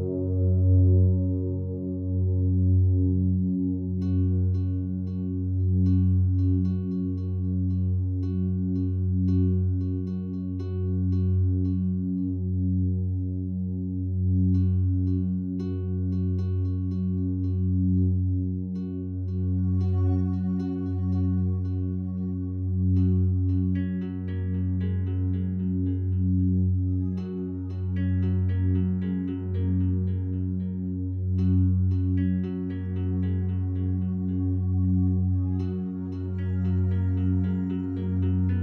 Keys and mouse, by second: 0.0 click, 0.8 click, 2.1 click, 4.2 click, 4.8-5.7 drag, 6.7 click, 7.0 click, 8.0-8.7 right drag, 8.7 click, 9.4 click, 9.6 click, 10.5-11.5 typing, 12.8-13.4 typing, 13.6 Return, 15.9 click, 16.8 drag, 18.6-19.3 drag, 19.3-20.0 typing, 19.4 click, 20.6-22.5 drag, 23.1 click, 23.3-24.2 drag, 24.5-25.4 drag, 25.5-26.5 drag, 27.9-28.8 drag, 30.1-31.9 ctrl+drag, 31.0 typing, 33.6-35.0 drag, 36.1-38.6 drag.